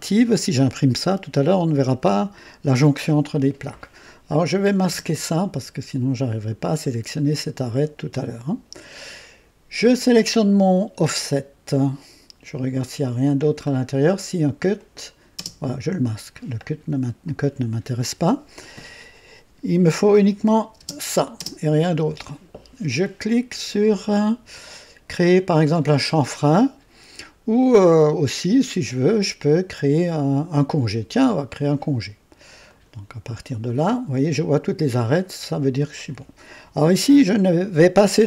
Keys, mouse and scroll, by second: 4.3 click, 4.9 space, 9.9 click, 13.2 click, 13.7 scroll down 1, 14.7 click, 15.4 space, 20.4 click, 20.8 space, 21.4 space, 32.6 click.